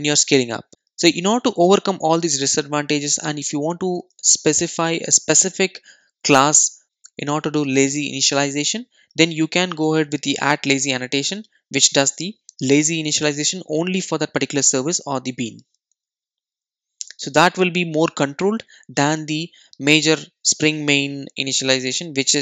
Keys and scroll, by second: 21.2 super+e.